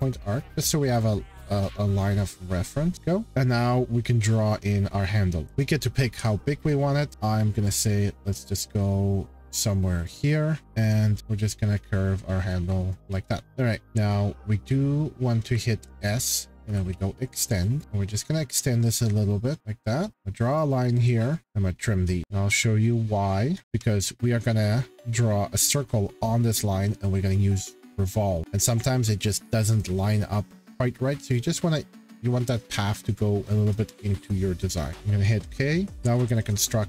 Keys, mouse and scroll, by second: 0.6 click, 1.7 click, 2.1 scroll, 2.9 scroll, 5.4-7.1 scroll, 7.1 click, 9.3-14.2 drag, 15.4 typing, 16.5-17.2 typing, 17.8 click, 17.8 click, 18.9 click, 19.6 click, 20.1 Escape, 21.8 click, 22.2 click, 22.9 click, 23.5 scroll, 23.6 Escape, 24.7 shift+scroll, 28.5-29.0 scroll, 30.0 shift+middle click, 32.3-33.2 scroll, 33.4-35.0 scroll, 34.9 click, 35.4 middle click, 35.9 click.